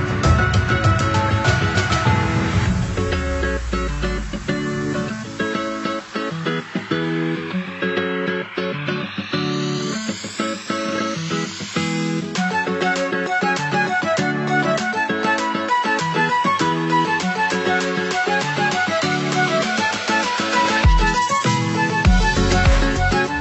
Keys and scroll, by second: 6.6 ctrl+0, 12.8 ctrl+=, 22.1 ctrl+=.